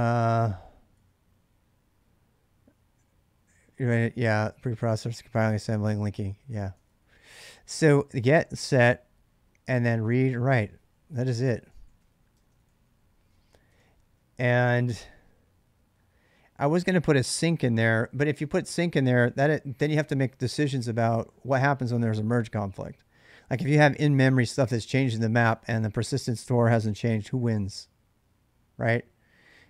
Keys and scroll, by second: 0.0-1.2 typing, 6.4-7.4 typing, 9.4-14.1 typing, 11.1 ctrl+[.